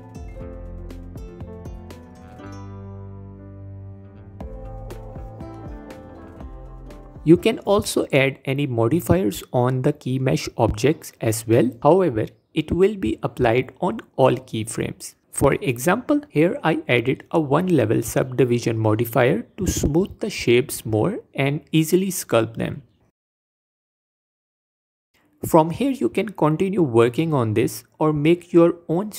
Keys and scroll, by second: 18.3 Tab, 19.6 f.